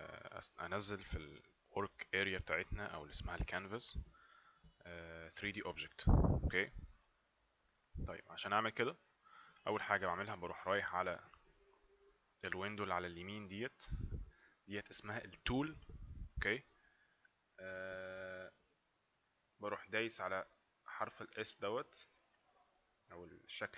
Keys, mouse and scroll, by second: 22.2 click.